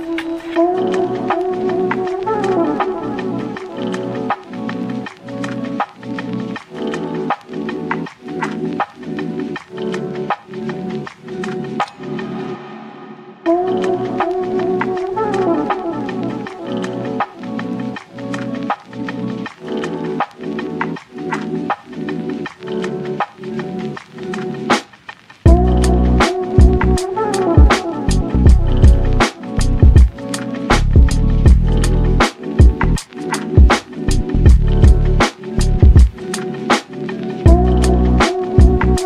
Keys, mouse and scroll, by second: 1.1-1.8 scroll down 2, 1.5 Tab, 1.8-2.1 shift+middle drag, 2.1 ctrl+s, 2.4 click, 2.8-5.0 middle drag, 5.0 click, 5.2-5.5 scroll up 1, 5.5 Tab, 5.9-6.2 scroll up 1, 6.2 Tab, 6.6-7.2 drag, 7.2 Tab, 7.7-10.3 drag, 11.4 click, 11.8 Tab, 11.9 scroll down 3, 12.2 shift+middle click, 12.5 click, 13.1 click, 13.5-15.4 drag, 16.2 click, 16.7-18.8 drag, 19.6-21.3 drag, 21.3-21.9 scroll down 3, 21.9 drag, 22.0-22.4 scroll down 1, 22.4-23.6 drag, 23.6 scroll up 2, 23.8-24.1 shift+middle drag, 24.1 ctrl+s, 24.3 click, 24.5-24.9 scroll down 1, 24.9 click, 25.8 s, 27.1 click, 29.9 click, 30.3 ctrl+s, 30.6-31.2 scroll up 3, 31.2-32.0 middle drag, 32.0-32.4 scroll down 1, 32.4-34.1 shift+middle drag, 34.1 click, 35.3-36.5 shift+middle drag, 36.5 ctrl+s, 38.0 click, 38.4 scroll down 1, 38.4 middle click.